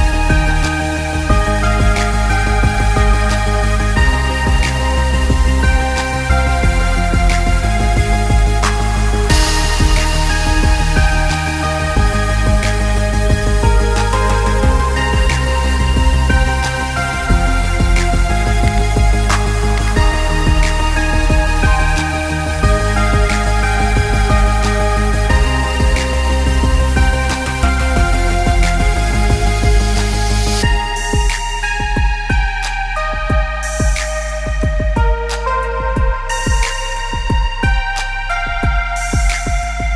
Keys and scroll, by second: 0.0-3.3 typing, 12.8 ctrl+-, 12.9 ctrl+-, 13.2 ctrl+-, 16.7 ctrl+=, 16.9 ctrl+=, 17.3 ctrl+=, 18.7 ctrl+-, 23.3 ctrl+o, 29.0 v, 33.8 ctrl+-.